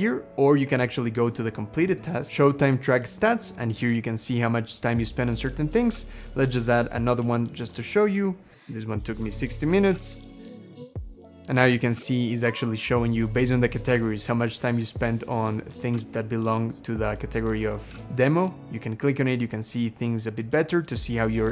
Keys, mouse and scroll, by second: 0.6 scroll down 2, 3.3 scroll down 3, 4.9-5.7 scroll up 5, 5.8 scroll down 2, 7.2 shift+click, 8.8-9.7 typing, 10.0 Return, 10.7-11.7 scroll down 6.